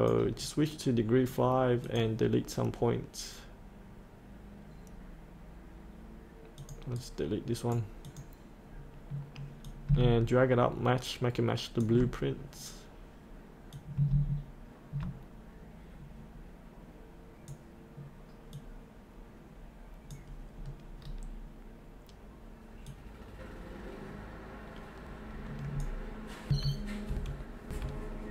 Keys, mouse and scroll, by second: 0.4 right click, 1.8 click, 6.9 right click, 8.0 click, 13.7-20.5 drag, 20.5 scroll down 1, 22.9-26.5 drag, 26.5 F8, 28.1-28.3 scroll up 1.